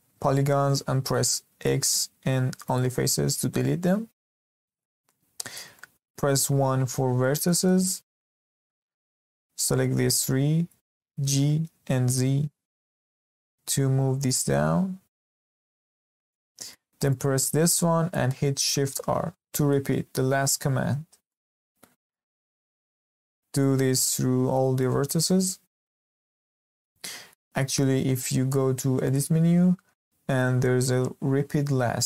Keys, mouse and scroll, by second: 1.6 x, 3.6-5.0 middle drag, 5.0-5.4 scroll up 1, 5.4-6.5 shift+middle drag, 6.5 1, 7.2-8.0 shift+middle drag, 8.0-8.3 scroll up 2, 8.3-9.4 shift+middle drag, 9.4 click, 11.2 g, 16.3-17.0 middle drag, 17.0 click, 19.1 shift+r, 21.3-21.8 middle drag, 21.8 scroll up 1, 22.1-22.9 shift+middle drag, 22.9 drag, 24.3 shift+r, 24.8 click, 25.1 shift+r, 25.6-26.0 scroll down 2, 26.0-29.0 shift+middle drag, 29.0-32.0 drag.